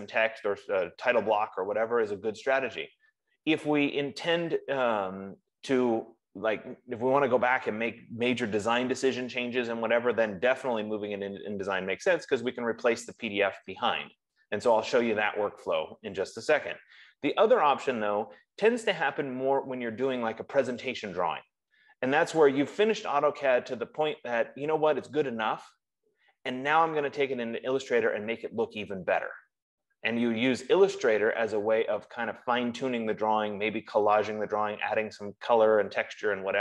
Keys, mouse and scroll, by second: 24.5 F15.